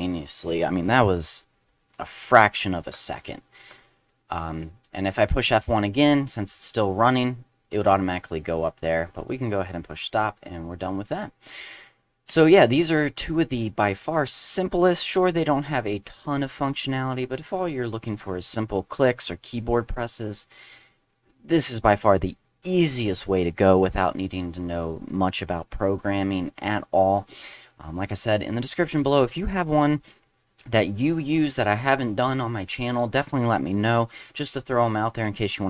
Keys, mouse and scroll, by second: 4.1-4.4 drag, 8.9 click, 12.3 click, 12.7 click.